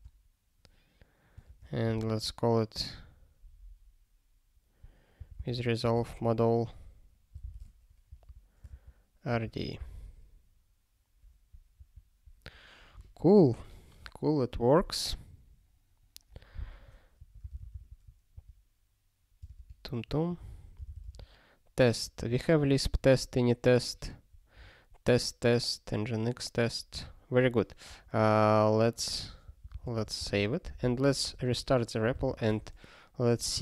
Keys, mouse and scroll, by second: 32.5 super+w.